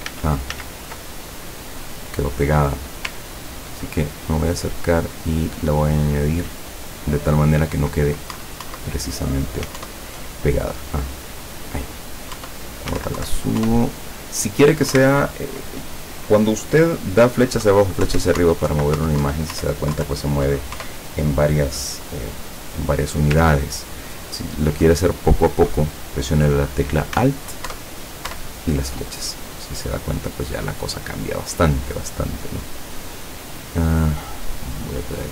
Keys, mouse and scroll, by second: 0.2 ctrl+z, 2.9 click, 3.3-3.8 ctrl+scroll up 4, 3.8 ctrl+scroll down 2, 5.1 click, 6.7 click, 8.4 Up, 9.8 alt+Up, 11.4 click, 12.4 Up, 13.7 alt+Up, 15.0 alt+Down, 18.0 Down, 18.4 Up, 18.7 Down, 19.0 Up, 19.3 Down, 19.6 Up, 20.0 Down, 20.8 Up, 23.7 ctrl+scroll up 2, 24.2 ctrl+scroll up 2, 27.7 alt+Up, 34.1 click, 35.2-35.3 drag.